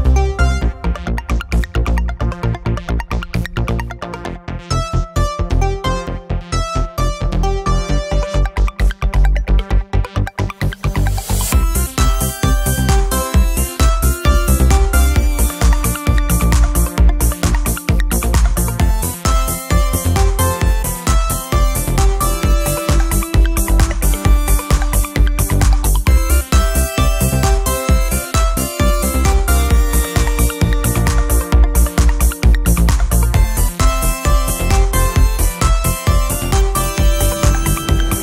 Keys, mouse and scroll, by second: 1.9 click, 3.5 click, 4.5 scroll up 1, 4.6-6.8 ctrl+drag, 7.2-7.7 ctrl+scroll up 4, 8.1-9.5 ctrl+drag, 9.9 ctrl+click, 11.5 ctrl+click, 12.8 ctrl+click, 13.4 ctrl+click, 14.9 ctrl+click, 16.3 ctrl+click, 18.2-18.6 ctrl+scroll up 2, 18.9 ctrl+click, 19.7 ctrl+click, 22.2-22.7 ctrl+scroll down 2, 24.0 ctrl+z, 25.3 ctrl+shift+k, 26.6 ctrl+shift+click, 27.9 Delete, 29.1-29.6 scroll up 3, 30.0 ctrl+click, 31.1 ctrl+click, 33.5-34.0 ctrl+scroll down 2, 35.0 ctrl+click, 36.1 ctrl+click, 37.2 ctrl+shift+click.